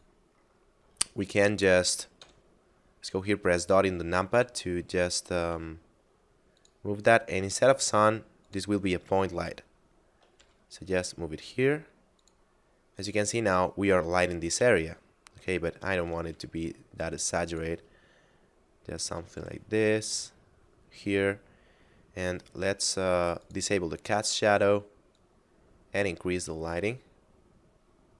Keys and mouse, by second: 2.1 KP_Decimal, 3.5 shift+middle click, 4.8 shift+middle click, 5.5 g, 6.6 click, 9.5 shift+middle click, 10.4 g, 12.2 click, 14.9 shift+middle click, 16.3 g, 17.5 click, 18.1 shift+middle click, 19.4 g, 20.1 click, 23.4 click.